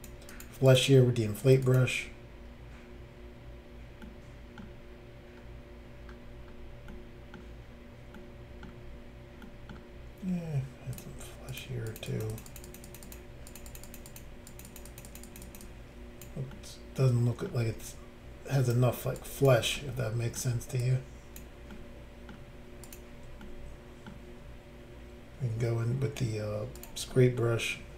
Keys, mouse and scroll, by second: 0.3 click, 0.4 click, 0.7 click, 0.8 double click, 1.4 click, 1.6 double click, 1.8 double click, 4.0 middle click, 4.7 scroll up 1, 5.3-5.7 scroll down 1, 6.4 scroll down 1, 6.9 middle click, 6.9 scroll down 1, 7.3 scroll up 1, 8.2 middle click, 8.2 scroll down 1, 8.5 scroll up 1, 9.5 middle click, 9.5 scroll down 1, 9.7 scroll up 1, 10.9 click, 11.0 click, 11.5 click, 11.6 click, 11.9 click, 12.0 click, 12.1 click, 12.2 double click, 12.3 click, 12.4 click, 12.5 click, 12.6 double click, 12.7 click, 12.7 click, 12.8 click, 12.9 double click, 13.0 double click, 13.1 double click, 13.5 double click, 13.5 double click, 13.7 double click, 13.7 double click, 13.8 double click, 13.9 double click, 14.1 double click, 14.1 double click, 14.5 double click, 14.6 double click, 14.6 double click, 14.7 double click, 14.9 double click, 15.0 double click, 15.0 double click, 15.1 double click, 15.2 double click, 15.4 double click, 15.4 double click, 15.5 double click, 15.6 double click, 16.5 middle click, 17.9 click, 19.2 click, 19.8 middle click, 20.8 click, 21.7 middle click, 22.8 click, 22.9 click, 23.4 middle click, 26.8 click, 26.8 click, 27.1 middle click.